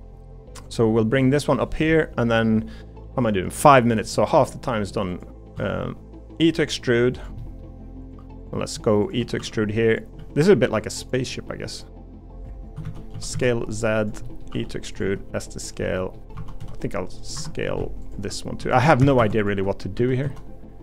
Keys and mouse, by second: 1.9 middle click, 3.5 middle click, 4.1 middle click, 4.7 middle click, 5.5 e, 7.4 middle click, 9.4 e, 10.2 s, 12.5 click, 12.8 ctrl+z, 13.1 s, 14.2 middle click, 14.5 e, 15.0 s, 15.8 middle click, 16.4 2, 16.6 s, 18.6 3, 19.0 a, 19.2 a, 19.9 s.